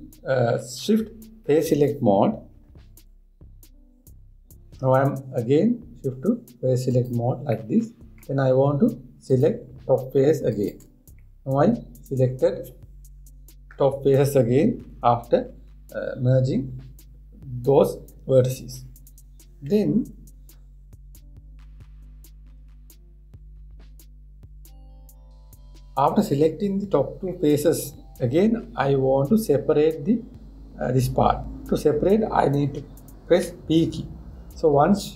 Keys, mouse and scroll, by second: 7.5 click, 8.2-9.9 middle drag, 9.9 click, 11.2 shift+click, 11.9-15.0 middle drag, 34.0 p.